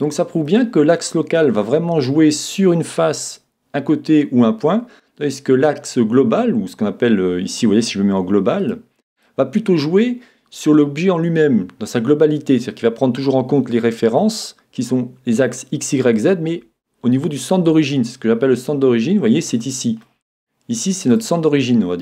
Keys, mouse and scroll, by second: 8.6 click, 18.4-21.5 middle drag, 21.2 click.